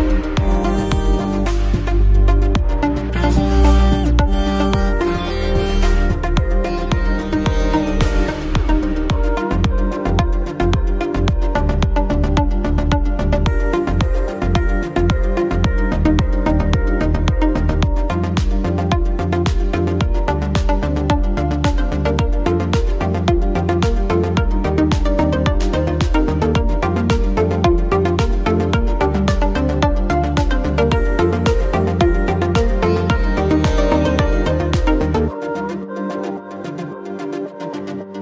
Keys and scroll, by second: 18.6 ctrl+z, 24.4 shift+space, 34.2 ctrl+c, 36.7 Return, 37.3 ctrl+v.